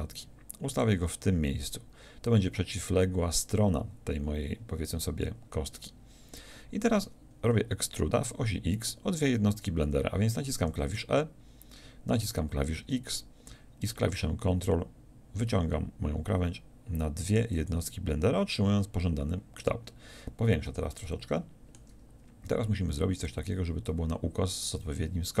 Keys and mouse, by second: 10.6 e, 17.7-19.8 drag, 19.8-20.9 middle drag, 20.9-25.4 drag.